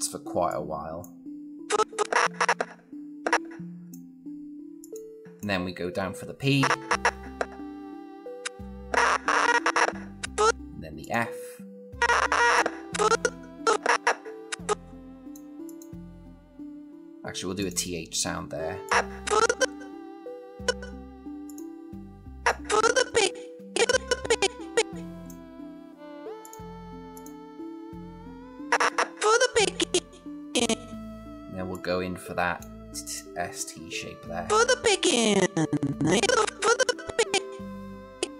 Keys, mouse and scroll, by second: 0.3-0.9 click, 12.2-15.4 click.